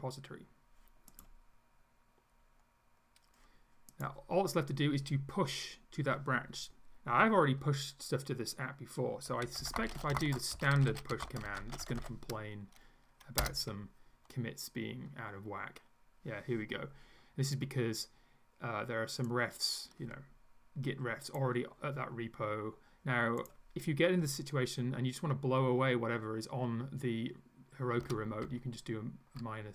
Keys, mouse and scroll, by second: 4.0 click, 9.2-12.5 typing, 13.4 Return, 19.3-21.6 drag, 23.4 click, 28.0 Up, 28.4 Left.